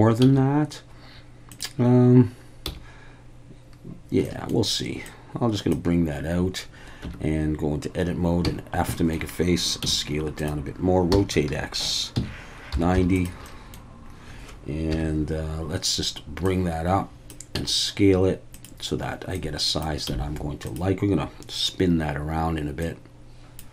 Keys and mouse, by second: 0.2 s, 1.5 drag, 2.6 f, 4.3 middle click, 5.1 click, 7.0 Tab, 8.5 f, 8.9 shift+middle drag, 9.8 s, 10.4 click, 11.1 r, 12.1 x, 12.7 9, 12.9 0, 13.1 click, 13.5 middle click, 14.9 KP_1, 16.4 click, 17.5 s, 18.5 click, 19.4 click, 20.1 s, 20.6 click, 22.8 click.